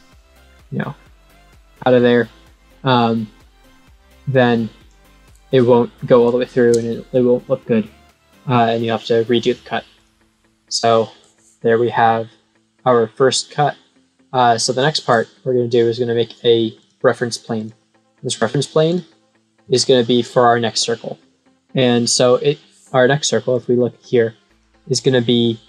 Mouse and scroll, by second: 0.4-1.5 scroll up 3, 2.1 scroll up 2, 3.6-4.8 drag, 5.4-5.9 scroll up 1, 6.3-6.8 scroll up 1, 9.9 click, 10.8-11.9 scroll up 1, 11.9-13.7 scroll up 1, 13.7-14.3 scroll up 1, 14.6-15.0 scroll up 1, 16.7 click, 17.5 click, 18.8 click, 19.8 scroll down 1, 23.4 click.